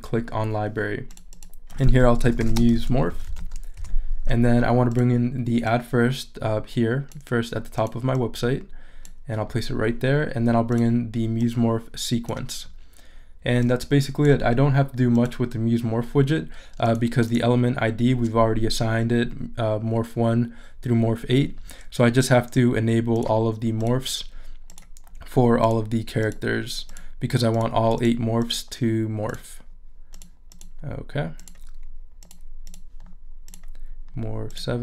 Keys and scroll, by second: 2.0-3.9 typing, 13.1 super+z.